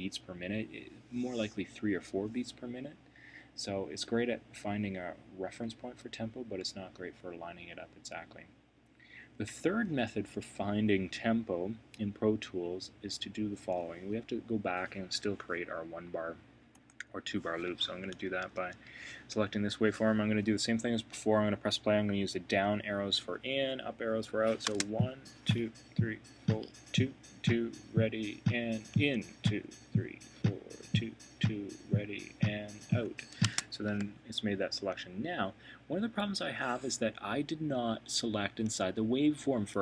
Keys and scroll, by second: 16.7 Return, 18.2 super+[, 28.9 Down, 32.8 Up.